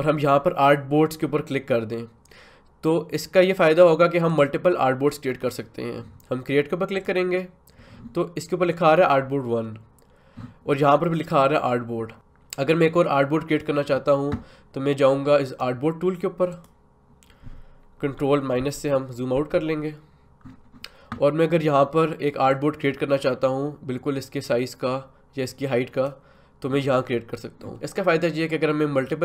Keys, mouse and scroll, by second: 4.3 click, 7.0 click, 15.5 right click, 16.5 click, 22.5-27.7 drag.